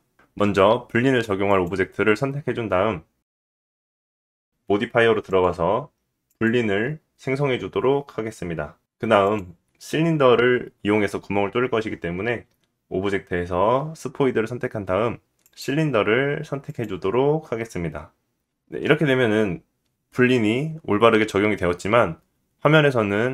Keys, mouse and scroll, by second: 0.3 click, 3.6 click, 5.3-6.2 drag, 9.3-16.7 drag, 16.8 click.